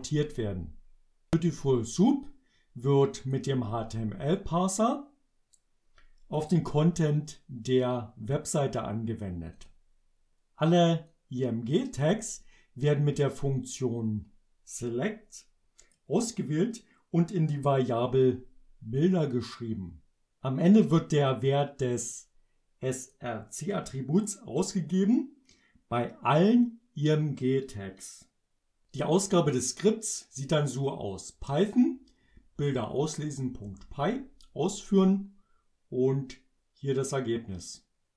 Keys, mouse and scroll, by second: 2.0-3.5 drag, 4.4-6.6 drag, 7.9-9.4 drag, 9.6 click, 11.2-12.2 drag, 13.4-16.2 drag, 19.0-20.3 drag, 21.9-23.3 drag, 33.7 Return.